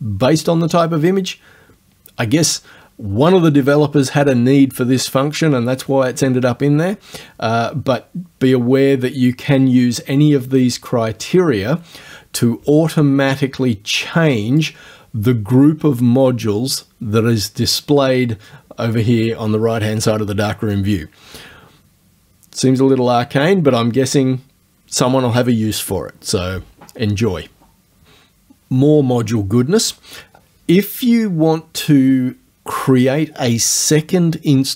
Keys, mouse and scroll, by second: 14.6 click.